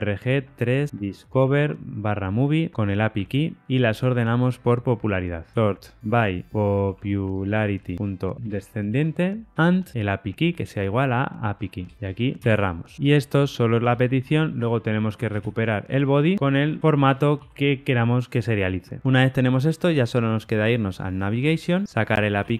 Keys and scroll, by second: 12.4 Tab, 16.3 Return, 17.0 Return.